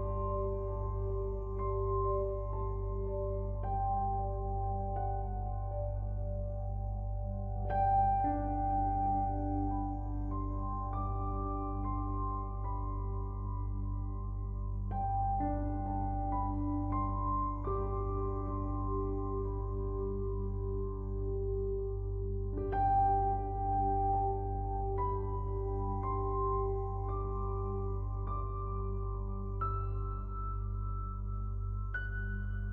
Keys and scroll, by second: 9.5 ctrl+t, 23.1 ctrl+u.